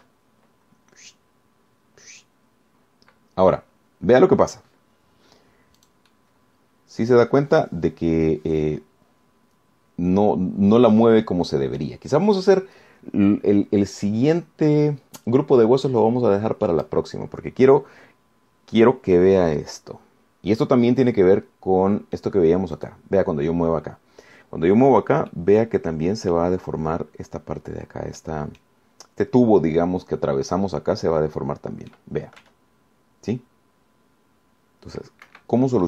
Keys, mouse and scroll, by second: 0.8 r, 1.2 z, 7.0 click, 7.3-8.7 drag, 8.8-9.2 scroll up 2, 9.3 scroll down 2, 9.8-13.2 middle drag, 22.1-23.6 middle drag, 24.0 click, 26.5-27.8 middle drag, 29.4 middle click, 32.2-33.3 middle drag, 33.6 r.